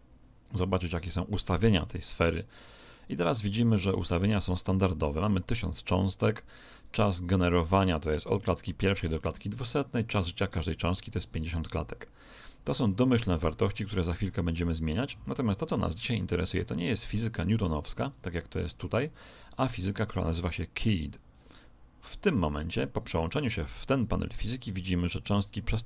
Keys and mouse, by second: 15.0-18.4 middle drag, 21.3 click.